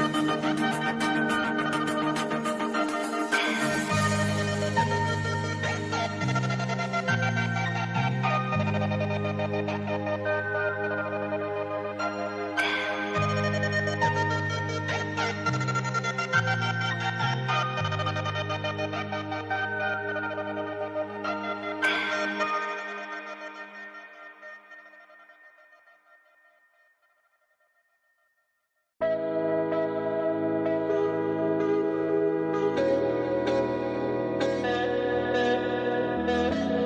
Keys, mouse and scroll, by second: 0.9-4.0 drag, 4.2 scroll down 1, 4.7 alt+scroll down 1, 5.4 click, 6.3 scroll up 1, 6.9 i, 7.2 click, 7.8 v, 8.1 click, 8.9 click, 9.5 v, 9.8 scroll down 1, 9.9-12.7 drag, 12.7 right click, 13.4 click, 15.0 right click, 15.2 right click, 16.8 click, 18.9 scroll down 1, 19.4-24.1 drag, 24.1 alt+scroll up 1, 24.5-26.3 drag, 27.5 Right, 30.0 click, 32.2 Right, 32.8 click, 33.1 alt+scroll down 1, 33.7 click, 34.0 i, 34.8 click, 35.8 v, 36.0 click.